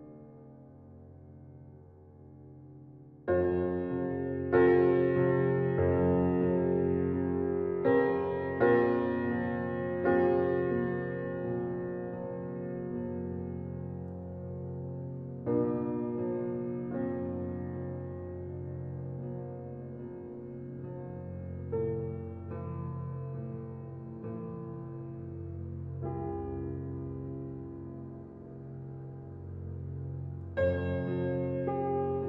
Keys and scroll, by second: 1.4 ctrl+t.